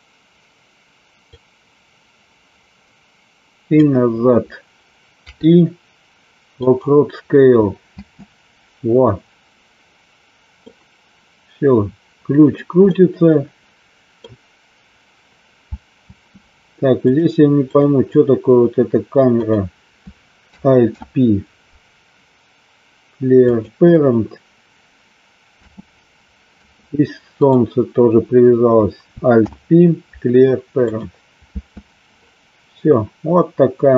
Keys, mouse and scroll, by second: 1.3-4.0 drag, 8.1 space, 10.7-12.7 middle drag, 12.9-14.4 middle drag, 16.2 space, 17.2 click, 19.6 click, 21.1 alt+p, 25.7 space, 27.6 click, 29.5 alt+p, 31.6 space, 33.1-33.9 middle drag.